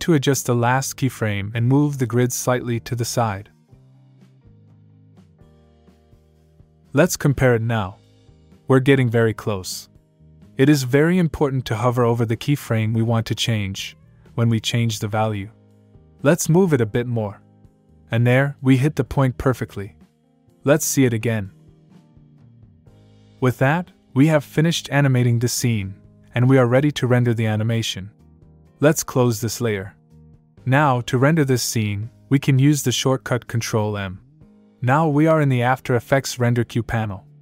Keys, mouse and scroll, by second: 3.0 click, 8.0 click, 11.8 click, 17.4 click, 22.1 click, 23.3 space, 27.4 space, 29.5 click, 34.3 ctrl+m.